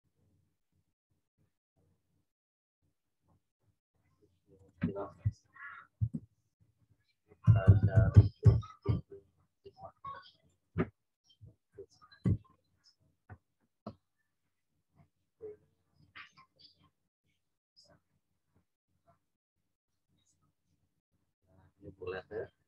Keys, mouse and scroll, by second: 3.4-4.0 scroll up 1, 4.5 click, 7.4 typing, 8.8 Return, 10.4 click, 10.7 typing, 12.2 Return, 14.8 scroll down 1, 20.3 click.